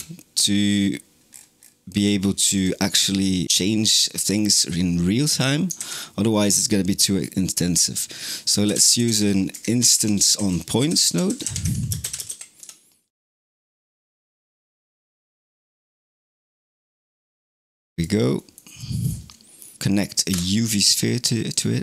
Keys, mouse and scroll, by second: 1.1-2.4 scroll down 9, 2.4 click, 2.8 n, 3.2 middle click, 3.4 click, 5.6 shift+a, 9.8 shift+a, 15.1 click, 16.6 click, 17.4 click, 18.2-19.7 middle drag, 19.7 shift+a, 21.7-21.8 middle drag.